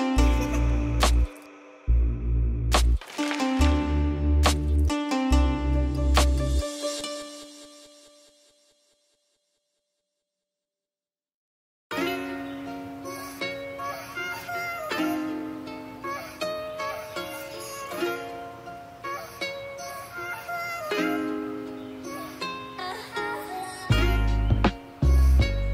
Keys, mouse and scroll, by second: 2.1 click, 4.3-4.7 middle drag, 5.4 click, 6.2 click, 6.8-7.1 middle drag, 7.7 middle click, 8.0-8.4 middle drag, 8.6-9.6 middle drag, 14.3-14.7 drag, 19.0-20.4 drag, 19.6 BackSpace, 20.9 click.